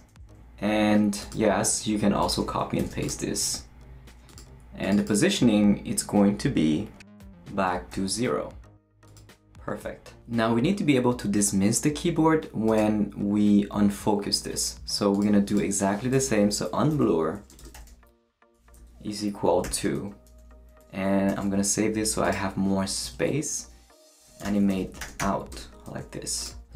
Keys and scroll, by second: 0.1 Return, 2.8 shift+super+c, 3.4 super+v, 7.1 BackSpace, 7.9 0, 16.2-19.6 typing, 18.3 Return, 21.3 super+s, 23.0 Left, 24.0-25.7 typing.